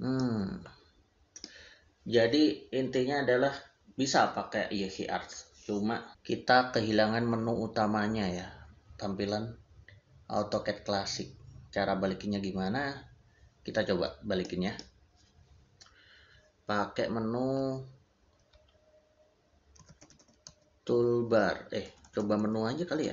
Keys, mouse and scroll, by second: 0.0 middle click, 14.3 middle click, 19.6 middle click, 19.6 t, 20.3 o, 21.7-23.1 typing.